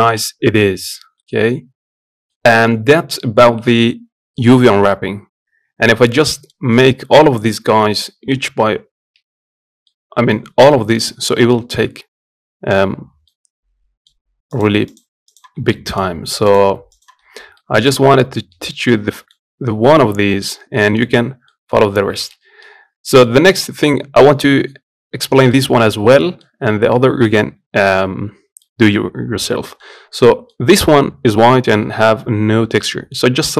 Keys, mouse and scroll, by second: 0.9-8.4 middle drag, 8.4 z, 9.6-14.3 middle drag, 14.3 click, 15.1 shift+click, 17.0-17.3 scroll down 1, 17.3-18.5 middle drag, 18.5 scroll up 1, 18.9-20.3 middle drag, 20.3 scroll down 1, 20.5 middle click, 20.9 scroll up 2, 21.2 middle click, 21.6 scroll down 1, 21.9 shift+middle click, 22.4-22.8 scroll up 1, 22.8 middle click, 23.3 click, 25.4-33.5 middle drag.